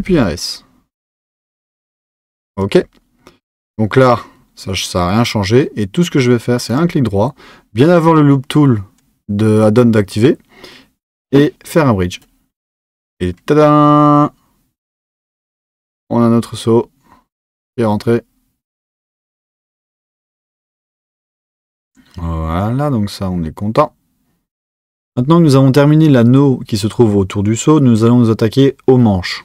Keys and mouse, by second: 6.7-14.9 right drag.